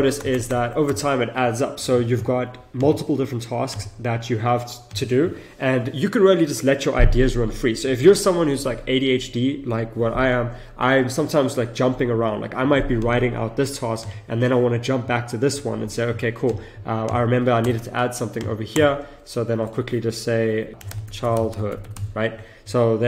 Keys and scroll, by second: 0.2 Return, 17.7 Return, 20.8 shift+c.